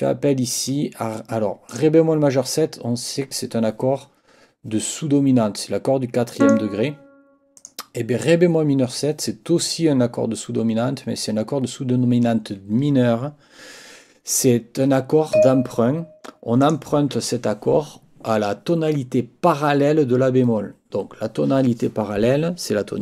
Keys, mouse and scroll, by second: 0.6 click, 1.7 click, 6.4 click, 7.6 click, 15.3 click, 16.6 click.